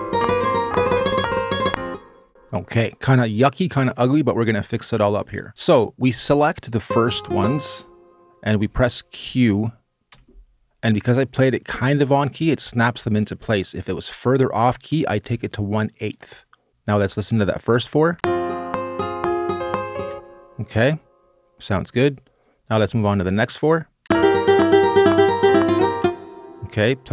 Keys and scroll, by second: 1.5 space, 9.9 q, 16.5 q, 17.9 space, 19.9 space, 23.8 space, 25.7 space.